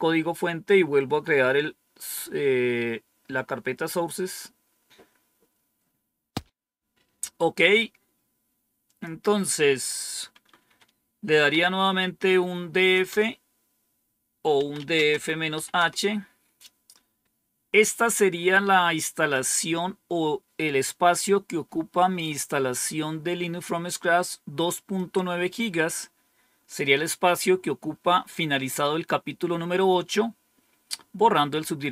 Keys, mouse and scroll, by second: 8.8 click, 11.0-11.9 typing, 13.0 typing, 14.3-16.0 typing, 17.2-19.3 drag, 24.9-25.9 drag.